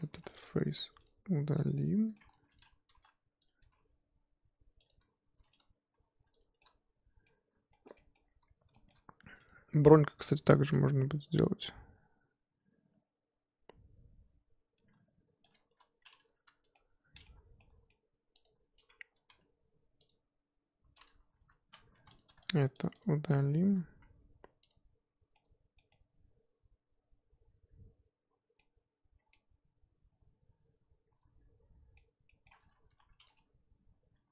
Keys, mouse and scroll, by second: 0.3 click, 1.2 x, 1.6-2.3 middle drag, 2.3 1, 2.6 click, 2.9 g, 3.7 g, 5.6 click, 6.0 g, 6.6-8.3 middle drag, 8.3-8.7 scroll up 1, 8.7-9.5 shift+middle drag, 9.5 click, 10.6 k, 16.7-18.4 middle drag, 18.4 click, 19.4 k, 22.0 3, 22.2 click, 22.9 shift+click, 24.7 x, 25.5-29.1 middle drag, 29.1 scroll down 2, 29.3-32.5 middle drag, 32.5-32.9 scroll up 1, 32.9 1, 33.2 click.